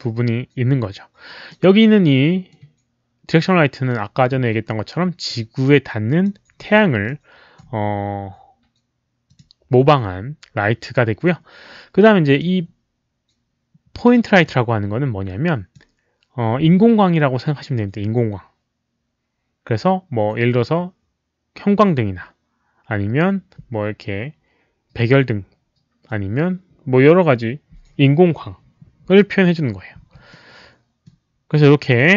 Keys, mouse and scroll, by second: 1.4-2.5 middle drag, 4.2 e, 5.2 click, 6.5 w, 7.0 middle click, 9.2 click, 12.2 click, 14.4-15.7 drag, 30.0 w, 30.2 middle click.